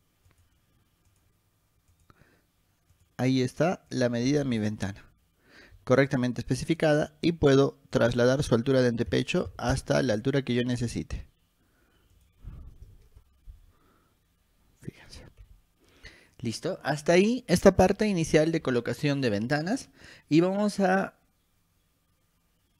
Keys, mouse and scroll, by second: 0.5 click, 1.3 click, 2.1 click, 3.1 click, 4.1 click, 5.4 middle click, 5.4 scroll down 2, 6.8 click, 8.1 click, 12.3 click, 12.6 2, 15.3 click, 16.3 scroll down 1.